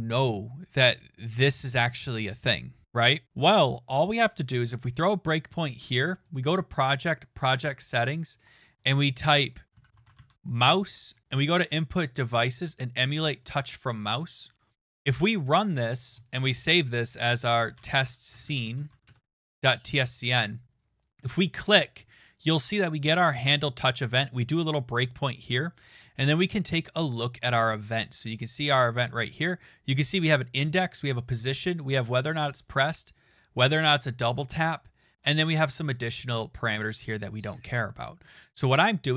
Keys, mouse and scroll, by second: 0.0 Tab, 4.9 click, 6.3 click, 7.0 click, 8.0 click, 8.4 click, 9.5-10.6 typing, 11.1 click, 13.5 click, 14.5 click, 15.2 click, 17.2-19.4 typing, 24.4 click, 28.7 click.